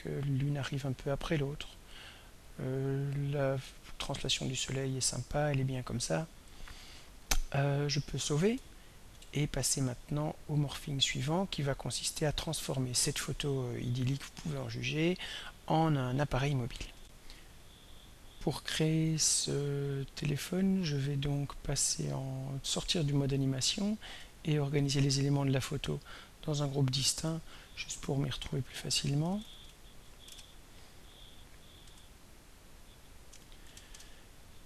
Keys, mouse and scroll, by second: 2.5-7.1 drag, 9.1 ctrl+s, 11.0 click, 17.0 r, 21.3 click, 23.3 click, 23.8 click, 24.3 shift+click, 25.4 click, 26.8 click, 27.5 click, 28.6 click, 29.1-30.6 typing, 31.9 F2, 32.4 click, 33.3 End, 33.7 BackSpace, 33.9 Return.